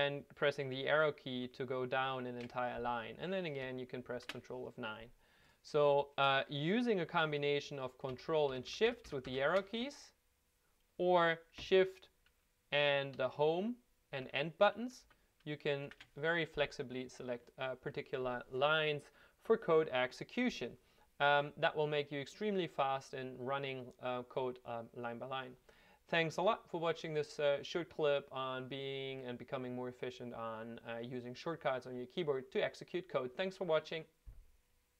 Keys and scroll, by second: 0.8 shift+Down, 1.3 shift+Down, 2.0 shift+Down, 4.1 ctrl+F9, 8.5 ctrl+shift+Left, 8.7 ctrl+shift+Left, 8.9 ctrl+shift+Left, 9.0 ctrl+shift+Left, 9.3 ctrl+shift+Left, 13.2 shift+End, 14.2 shift+Home, 15.0 shift+End, 15.9 shift+Home.